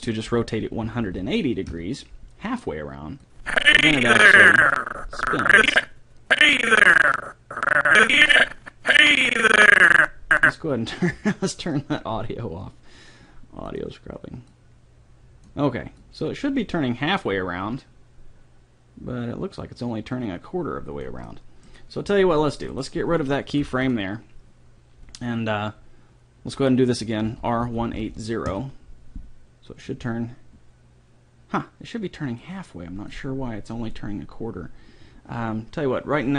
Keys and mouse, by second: 0.4 r, 3.4-5.2 drag, 11.6-13.5 drag, 14.5 click, 16.4-17.9 drag, 21.2 middle click, 22.2 a, 23.6 Delete, 27.3 r, 30.0-31.8 drag, 33.1-34.8 drag.